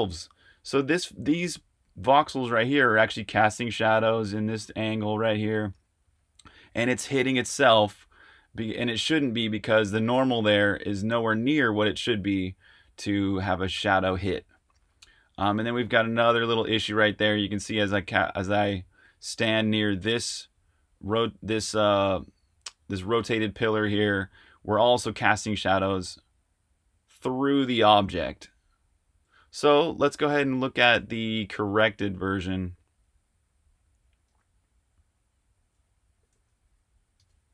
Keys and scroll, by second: 14.6-15.8 typing, 25.7-29.1 typing, 30.9 super+q, 32.8 k, 34.2 super+Tab, 37.1 super+r.